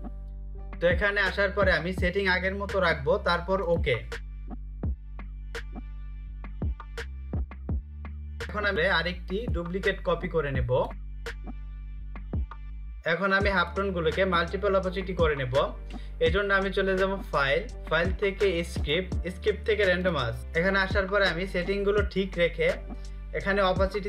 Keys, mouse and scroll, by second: 2.8 click, 7.8 click, 11.0 a, 11.5 click, 11.8 click, 16.4 click, 17.9 click.